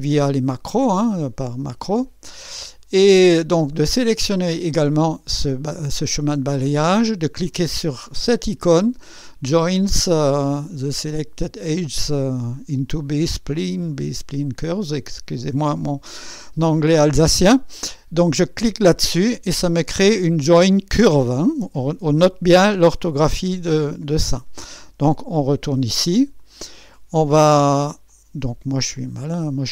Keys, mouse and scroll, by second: 4.3 click, 18.4 click, 25.3 click, 26.4 click, 28.1 click, 29.0 click.